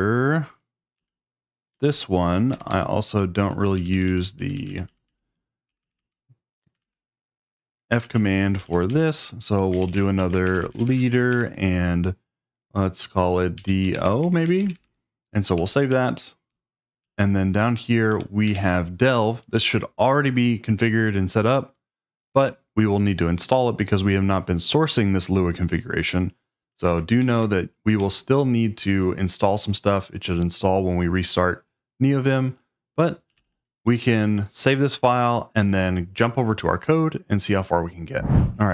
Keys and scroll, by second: 1.0-11.4 typing, 13.3-19.0 typing, 26.9 Escape, 27.3-28.4 typing, 33.3 j.